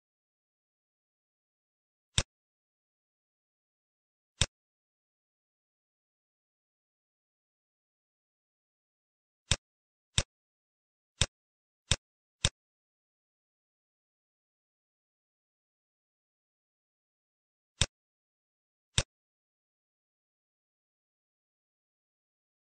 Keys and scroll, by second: 0.6 0, 2.5 space, 3.7 z, 22.1 F4.